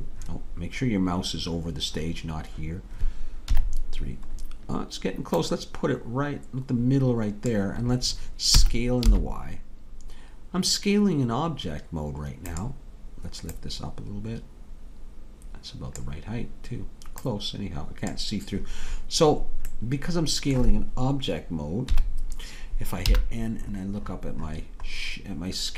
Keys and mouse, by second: 3.5 KP_3, 4.4 middle click, 5.5-7.5 drag, 8.6 s, 13.6-16.0 drag, 17.2-19.3 drag, 21.9 KP_3, 23.1 n.